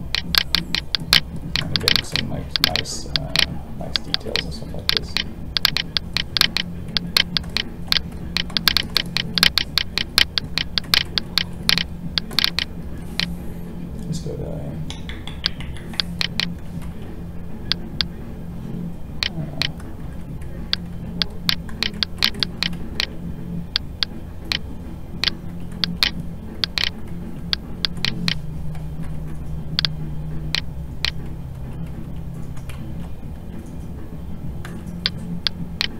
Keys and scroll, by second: 20.0 ctrl+z, 32.8 ctrl+z.